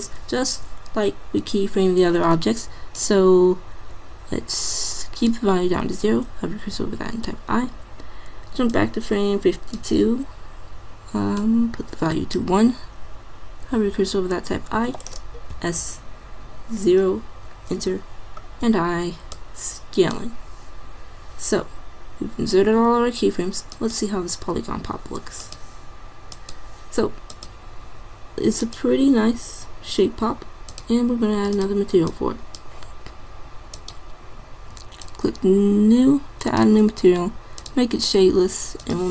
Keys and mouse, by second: 3.0-4.9 drag, 6.8 i, 8.7-10.5 drag, 11.4-13.2 drag, 13.8 i, 15.5 s, 18.6 i, 37.9-39.1 drag.